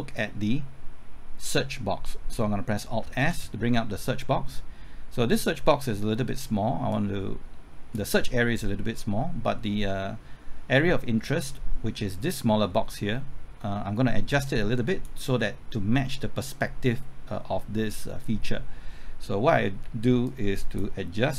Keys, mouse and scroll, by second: 3.2 alt+s, 6.9-21.3 drag.